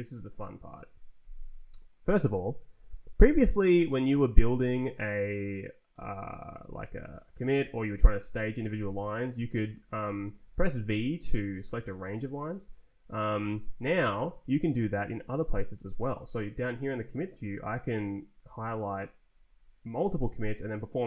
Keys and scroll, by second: 0.3 Right, 4.3 Down, 5.9 Return, 6.6 Down, 6.8 Return, 7.6 shift+Down, 8.9 Up, 10.4 v, 10.6 Down, 11.7 Up, 12.5 Down, 13.5 Up, 14.2 Escape, 15.9 Up, 17.5 shift+Down, 18.8 shift+Up, 19.8 shift+Down.